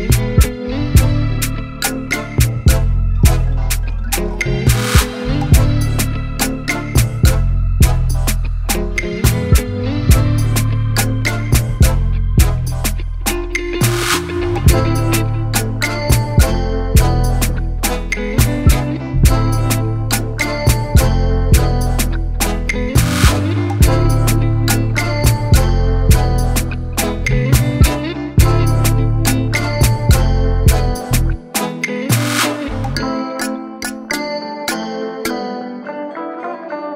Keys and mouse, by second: 0.0-2.7 typing, 3.6-5.0 drag, 5.7 click, 7.0 click, 8.9 click, 9.5 click, 10.5 click, 11.1 click, 13.0 click, 14.8 click, 16.1 click, 17.1 click, 18.2 click, 18.8 click, 20.0 click, 21.8 ctrl+t, 22.0 ctrl+t, 23.4 shift+click, 25.1-26.7 shift+drag, 28.6 shift+click, 30.6 shift+click, 31.8 click, 33.5 click, 35.2 click.